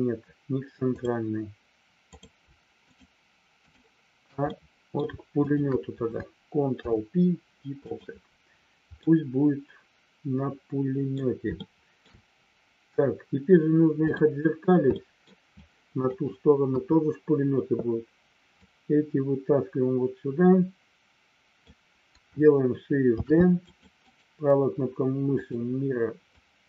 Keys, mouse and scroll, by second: 1.0 click, 2.9 shift+click, 3.6 shift+click, 4.5 middle click, 6.7 ctrl+p, 8.9-11.1 middle drag, 11.6 shift+middle click, 14.1 click, 15.0 middle click, 15.5 click, 16.6 KP_1, 18.6-21.6 drag, 23.1 shift+d, 23.6 click, 26.4-26.6 drag.